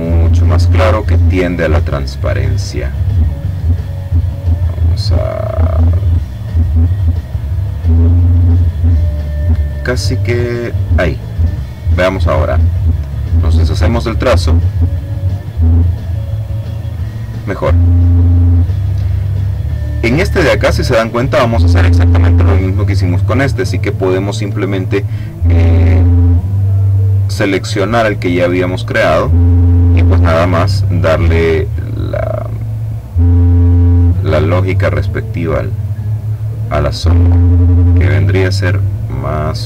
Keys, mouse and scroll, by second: 0.9-2.4 drag, 3.8-10.9 drag, 11.5 click, 13.4-14.5 drag, 17.6-19.1 middle drag, 19.9 click, 23.7 click, 25.6 click, 26.7 click, 28.1 click, 31.3 click, 33.4-34.8 drag, 35.5-39.6 drag.